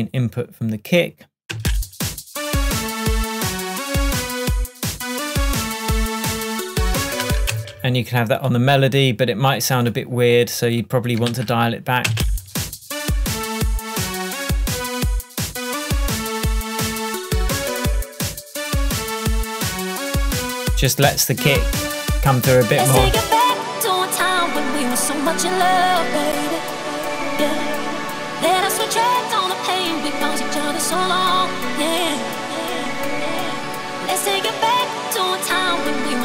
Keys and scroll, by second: 1.6 space.